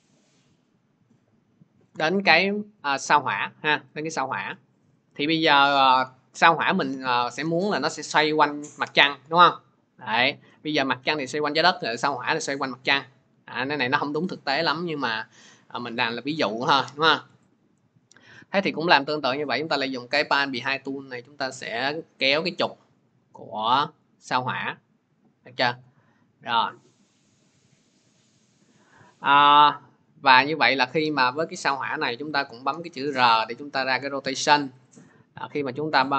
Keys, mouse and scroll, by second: 5.2 click, 10.2-15.4 drag, 17.3-24.6 drag, 29.1 middle click, 31.1 click, 32.1 r.